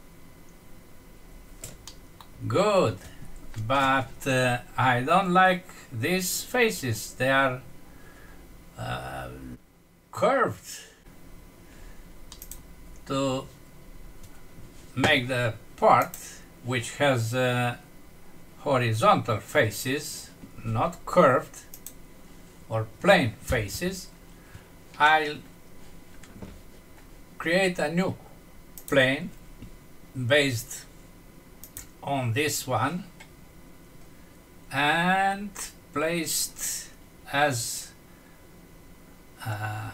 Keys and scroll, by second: 1.9 F6, 12.3 F6.